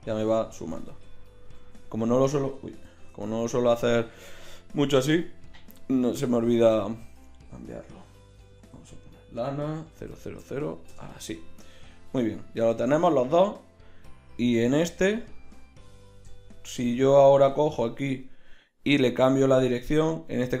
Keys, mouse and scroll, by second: 0.9 ctrl+z, 1.6 ctrl+z, 2.9 ctrl+shift+z, 5.2-7.0 drag, 7.0-10.1 middle drag, 10.1 KP_0, 11.7-13.7 drag, 18.1-19.2 drag, 19.4-20.6 middle drag.